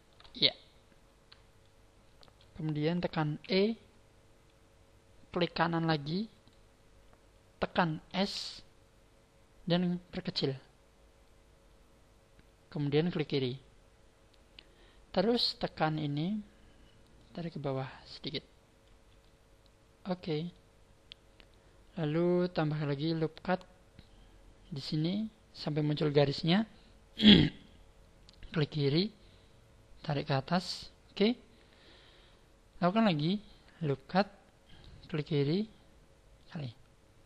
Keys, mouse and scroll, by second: 1.6 shift+middle click, 3.4 e, 6.5 right click, 8.4 s, 13.2 click, 15.9 click, 17.2 click, 19.3 middle click, 23.2 click, 33.7 click.